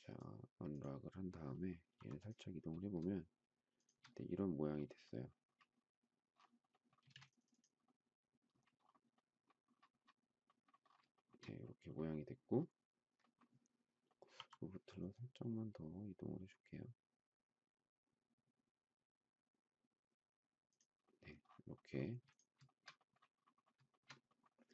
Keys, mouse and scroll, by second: 1.9 m, 3.7 shift+click, 7.0 space, 11.1 shift+middle click, 14.3 m, 22.0 space, 22.6 shift+middle click, 23.9 shift+middle click.